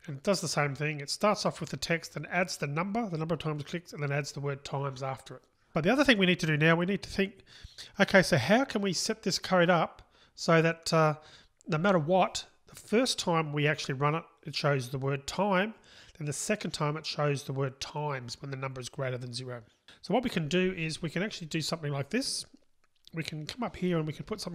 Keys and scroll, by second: 0.7 Return.